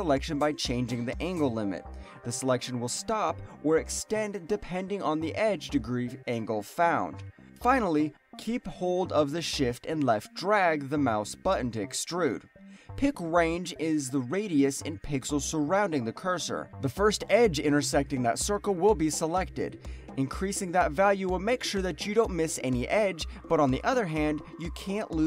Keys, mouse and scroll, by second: 0.1 alt+click, 0.7 alt+right click, 0.9 alt+click, 9.5 shift+click, 13.3 alt+middle click, 13.6-14.1 alt+scroll up 2, 13.9 alt+middle click, 14.3 alt+middle click, 14.6 alt+right click.